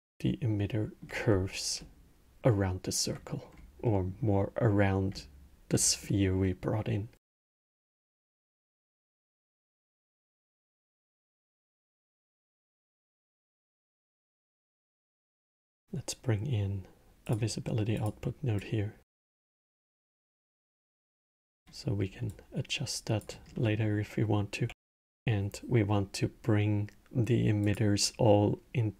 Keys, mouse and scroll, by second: 0.9 scroll, 1.5-3.2 alt+middle drag, 3.2 scroll, 3.6-4.4 middle drag, 4.4 scroll, 4.9-8.5 alt+middle drag, 8.5 scroll, 9.0-10.0 middle drag, 10.0 scroll, 10.8-11.9 middle drag, 11.9 scroll, 13.4 shift+a, 18.3 drag, 19.6 click, 20.6 click, 21.1 click, 22.0-23.3 drag, 23.3-24.6 middle drag, 24.6 shift+a.